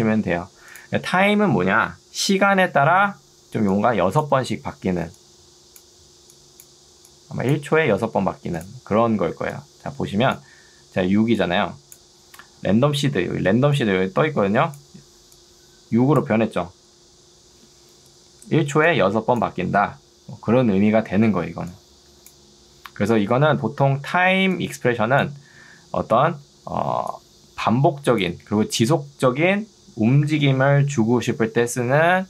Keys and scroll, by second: 0.2 Escape, 9.4 ctrl+2, 23.6 Escape, 24.2 ctrl+2.